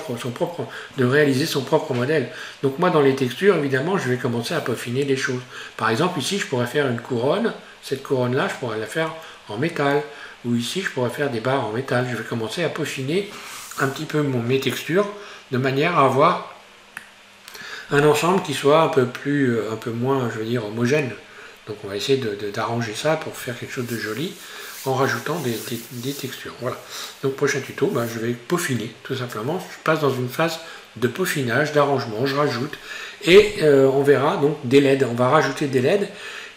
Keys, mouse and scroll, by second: 15.2 scroll down 1, 16.1 scroll up 1, 17.0-20.1 middle drag.